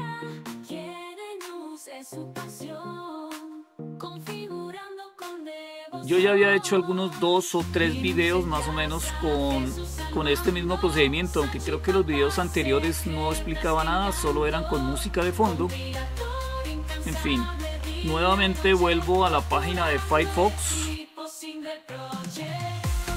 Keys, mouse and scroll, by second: 18.5 super+3, 20.9 scroll down 1, 21.4-22.0 scroll down 1, 22.9-23.1 scroll down 1.